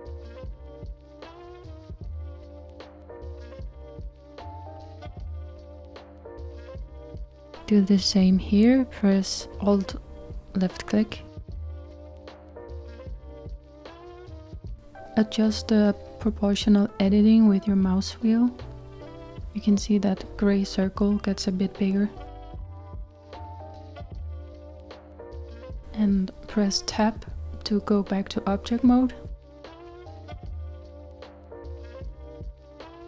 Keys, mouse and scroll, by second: 8.7 click, 8.9 click, 11.1 alt+click, 14.7 s, 25.8 Tab, 28.1-33.0 middle drag.